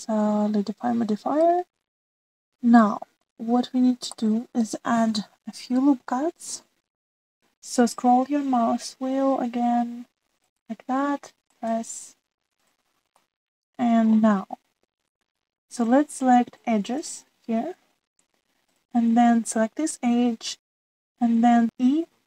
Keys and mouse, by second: 3.0 middle click, 5.1 middle click, 7.2 ctrl+r, 14.2 middle click, 18.0 click, 19.6 click.